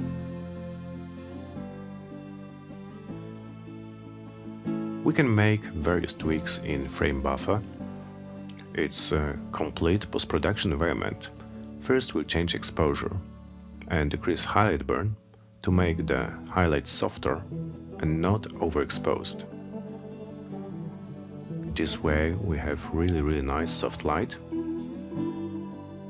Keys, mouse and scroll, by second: 2.9-3.8 drag, 7.6 click, 11.0 click, 15.0-23.2 drag, 24.4 click, 25.4 BackSpace, 26.0 Return.